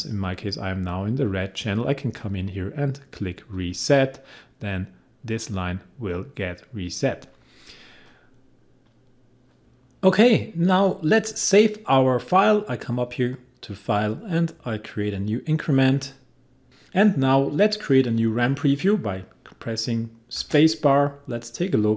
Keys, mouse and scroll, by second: 3.6 click, 8.1 click.